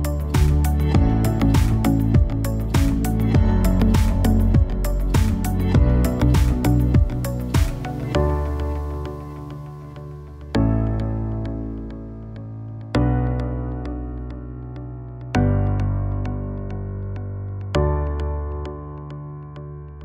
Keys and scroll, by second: 0.7 Up, 1.1 Down, 2.6 BackSpace, 15.6 alt+v.